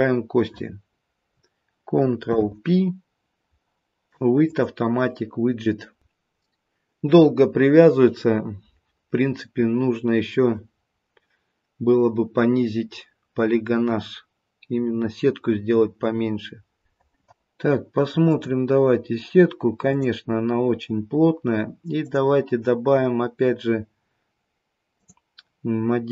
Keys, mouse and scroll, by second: 2.2 ctrl+p, 18.3 click, 19.8 click, 24.8 click.